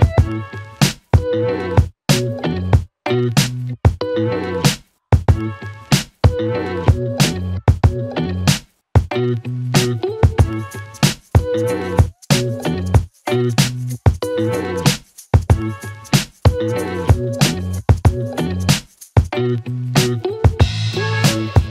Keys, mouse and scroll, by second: 0.8 shift+b, 1.1 g, 3.0 click, 8.1-8.6 click, 8.7-10.8 typing, 12.1-13.6 click.